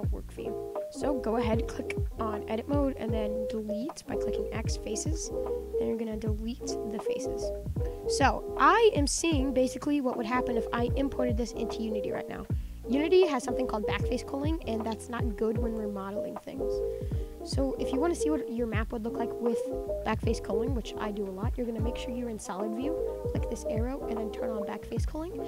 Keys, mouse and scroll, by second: 0.1 s, 0.7-2.5 middle drag, 2.5 Tab, 2.9 click, 3.5 x, 5.0-6.4 middle drag, 6.4 click, 6.6 x, 7.7 middle click, 7.9-8.4 scroll up 2, 8.4-12.0 middle drag, 12.8 scroll up 4, 13.4-15.3 shift+middle drag, 15.3-16.0 scroll down 10, 16.0-16.6 middle drag, 16.6 scroll up 6, 16.8-20.0 middle drag, 23.2-24.8 drag, 25.2-25.4 middle drag.